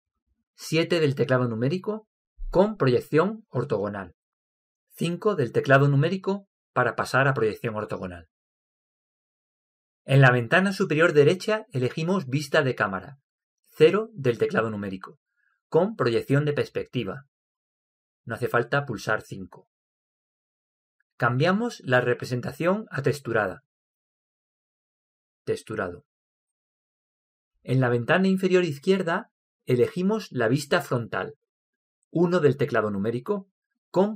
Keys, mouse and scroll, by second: 1.3 KP_7, 14.4 KP_0, 26.2-28.6 drag, 32.1 KP_1.